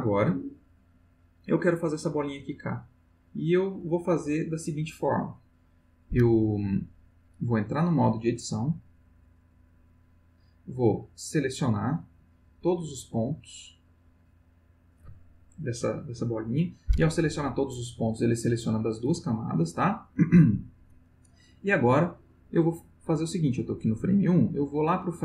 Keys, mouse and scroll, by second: 5.4 click, 8.0 click, 9.4 click, 12.2 click, 13.2-14.2 drag, 18.5 click, 24.1-25.2 drag.